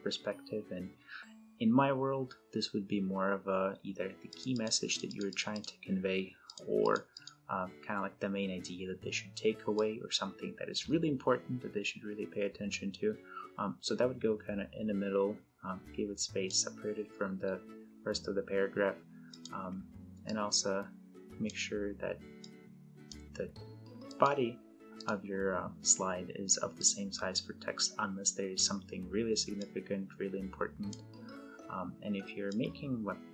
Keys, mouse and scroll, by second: 4.1 click, 9.5-16.4 drag, 19.0-21.3 drag, 29.3-31.0 drag.